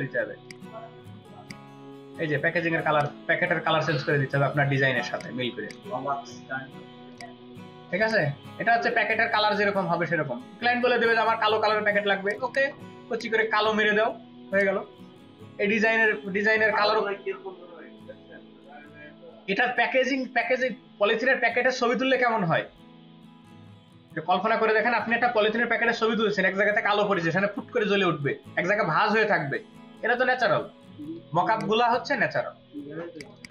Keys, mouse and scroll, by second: 12.4 double click, 31.0 space, 31.5 ctrl+alt+click, 33.3 double click.